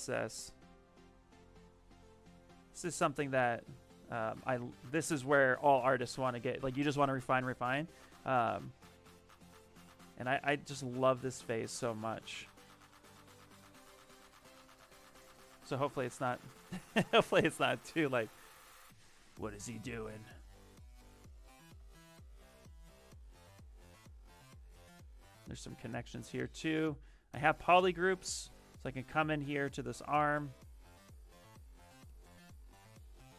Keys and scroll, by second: 21.2 s.